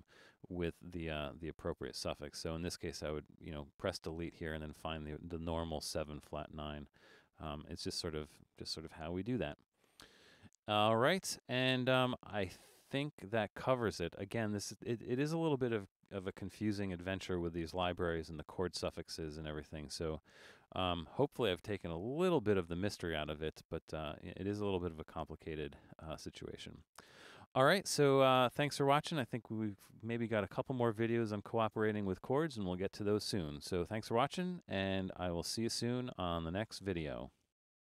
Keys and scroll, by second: 17.3 super+-, 18.1 super+-, 20.1 super+-.